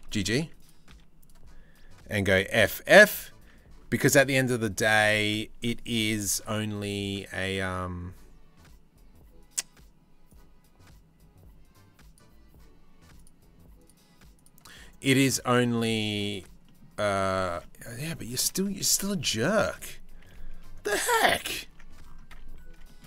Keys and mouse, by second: 0.5 2, 2.0 f, 2.3 f, 3.1 Tab, 4.0 Tab, 4.6 Tab, 4.7 middle click, 17.1 Tab, 19.2 1, 20.5 KP_3, 20.8 KP_1.